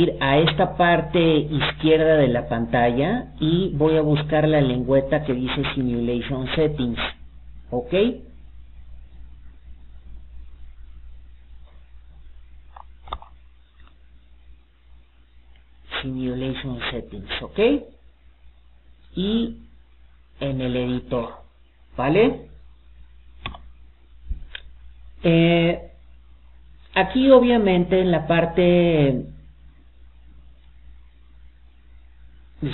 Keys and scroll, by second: 4.8 alt+d, 15.1 Escape.